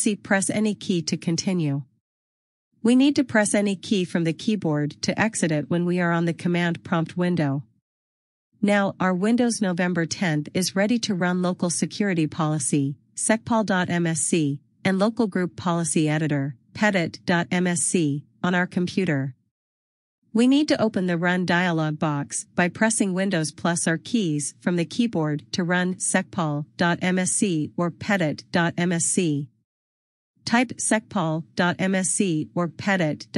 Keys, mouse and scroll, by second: 9.6 click, 15.9 right click, 19.7 click, 24.3 click, 26.5 click, 28.1 click, 30.3 click, 32.7 click.